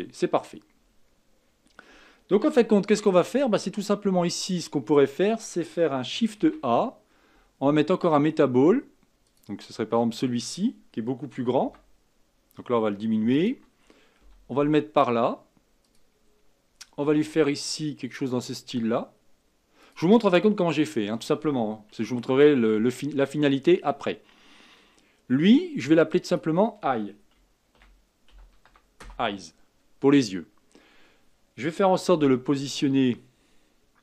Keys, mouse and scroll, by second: 0.9-1.3 scroll down 2, 1.3-2.7 scroll up 3, 2.7-3.4 shift+middle drag, 3.4-4.4 scroll up 3, 4.4-5.4 scroll down 4, 5.4-6.3 scroll down 1, 6.3 shift+a, 11.6 s, 14.2 g, 17.0 s, 20.4-21.4 scroll up 4, 22.1-25.2 shift+middle drag, 26.1 click, 26.3-29.4 drag, 32.1 g.